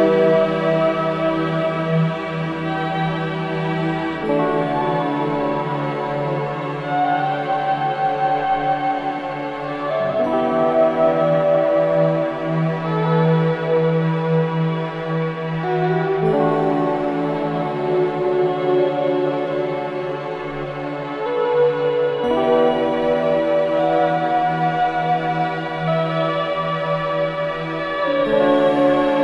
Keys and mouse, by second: 0.0 shift+click, 0.6 i, 1.0 click, 2.1 Right, 2.2 Right, 2.4 Right, 2.6 Right, 4.0 alt+s, 5.3 ctrl+z, 6.1 click, 7.0 d, 8.3 shift+click, 9.2 click, 9.5 space, 10.3 space, 10.6 click, 10.9 space, 12.7 space, 13.6 ctrl+alt+click, 14.4 click, 15.0 ctrl+alt+click, 16.7 click, 17.6 click, 18.3 click, 19.0 shift+click, 22.5 ctrl+i, 23.6 Return, 25.0 click, 26.6 ctrl+s.